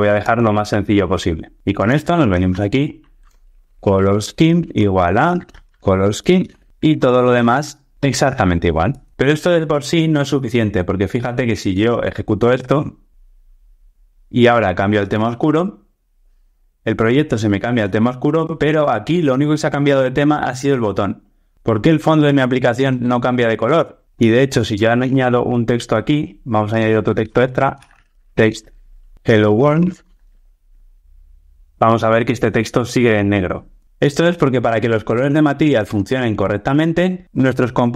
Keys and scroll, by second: 4.2 Return, 6.7 ctrl+alt+o, 6.7 alt+Return, 11.7 ctrl+r, 30.8 ctrl+r.